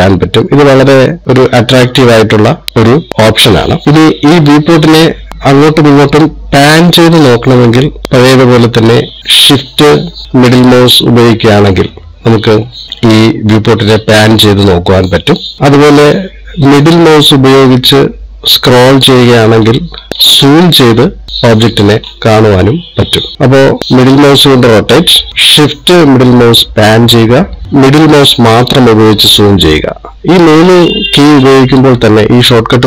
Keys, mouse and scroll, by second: 11.0 shift+middle click, 17.9-19.3 scroll up 6, 19.7-20.8 scroll down 12, 20.8-21.7 scroll up 7, 21.7 scroll down 1, 21.8-22.8 scroll down 5, 22.7-23.2 scroll up 5, 23.3 scroll down 2, 24.4 middle click, 26.3 shift+middle click, 28.7-29.7 scroll up 8, 29.7-30.5 scroll down 3, 30.5 scroll down 6, 31.2-31.8 scroll down 4, 32.1-32.6 scroll up 4.